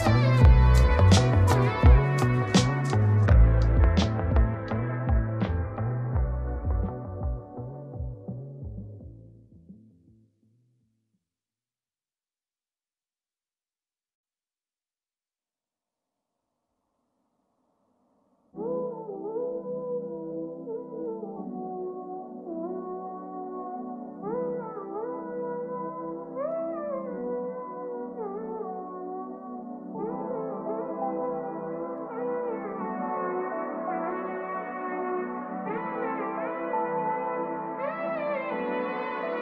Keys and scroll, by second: 2.8 ctrl+space, 17.1 ctrl+space, 34.0 ctrl+space.